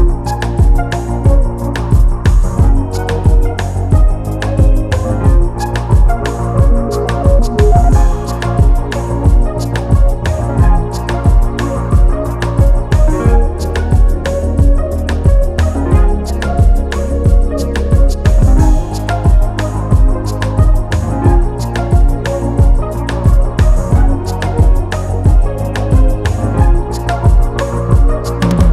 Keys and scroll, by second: 2.4 Return.